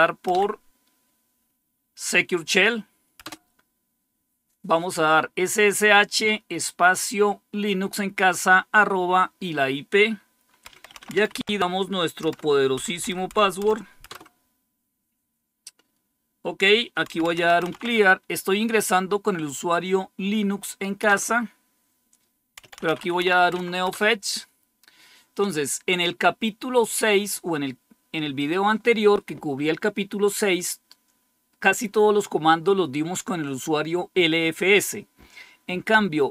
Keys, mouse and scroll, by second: 0.2 Up, 3.1 Return, 10.3-14.1 typing, 16.7-18.1 typing, 20.9 Return, 22.3-23.6 typing, 23.8 Return.